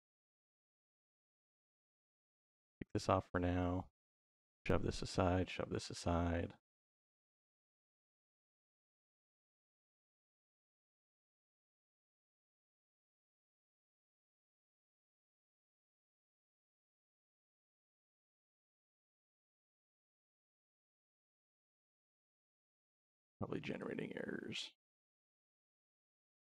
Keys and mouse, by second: 0.8 click, 2.2-2.5 drag, 3.4 click, 4.0 click, 5.1 click, 6.2 middle click, 7.5 middle click, 8.2 click, 9.3 click, 10.7 click, 13.1-14.3 drag, 15.7 click, 17.0-18.1 drag, 21.1-22.2 middle drag, 23.5 click.